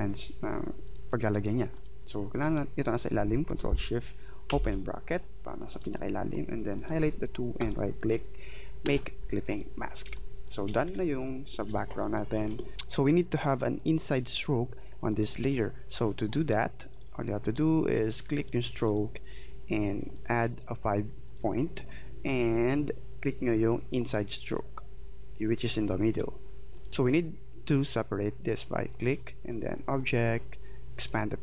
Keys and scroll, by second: 10.0 space.